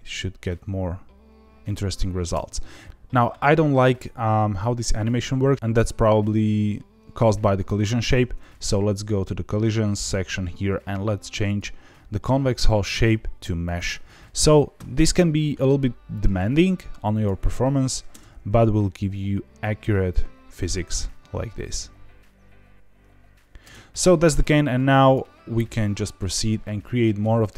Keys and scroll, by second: 2.1 space, 18.0 space, 23.6 space.